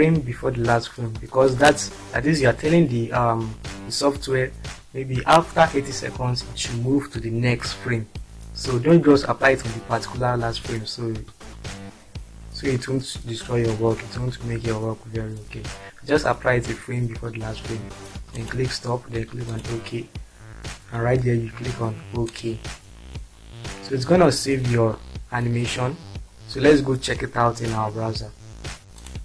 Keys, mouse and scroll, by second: 0.5 click, 1.5 click, 2.6 click, 5.4 click, 6.5 click, 7.1 click, 7.6 click, 11.1 click, 12.0 click, 18.3 click, 18.7 click, 21.2 click, 21.9 click, 22.9 click.